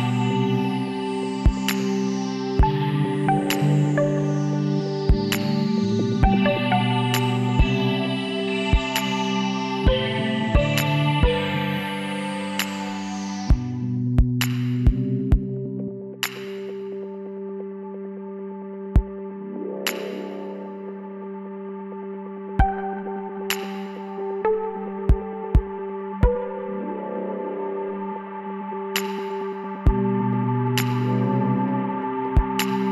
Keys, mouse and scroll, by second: 1.9-3.1 middle drag, 3.1-4.3 drag, 4.4 b, 5.9 b, 7.2 b, 8.4 b, 9.8 b, 17.2-18.3 middle drag, 18.3 KP_3, 19.2 middle click, 20.2 middle click, 21.5-23.2 middle drag, 22.7 s, 30.7-32.9 middle drag.